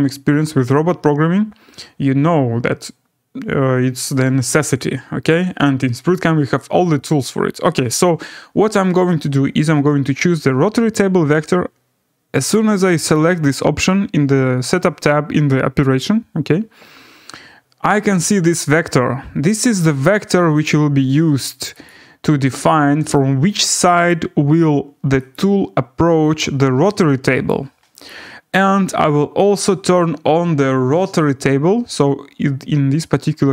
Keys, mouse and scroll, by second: 0.9-1.6 scroll, 1.7-2.0 scroll, 2.6-3.6 scroll, 3.6 scroll, 12.5 click, 13.1 click, 17.2 scroll, 20.6 click, 21.9 click, 23.1 click, 24.1 click, 25.3 click, 26.4 click, 27.5 click, 28.1 click.